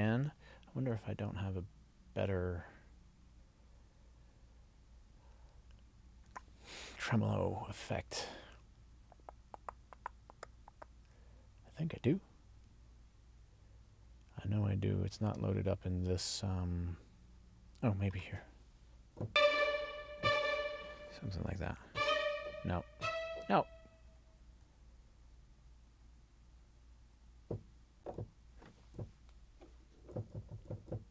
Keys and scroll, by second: 21.7 Down, 26.0 Down, 27.2 Up.